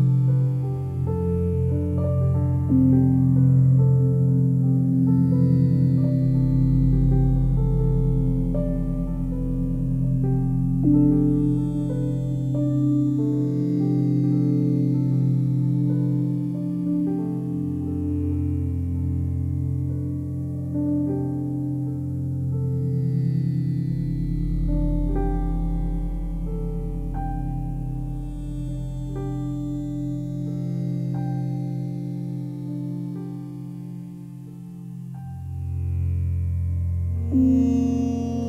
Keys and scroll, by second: 37.2 ctrl+z.